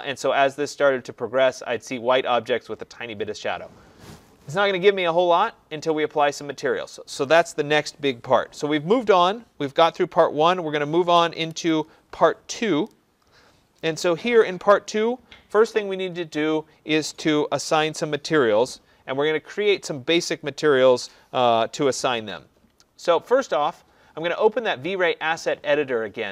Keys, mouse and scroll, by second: 7.2 click.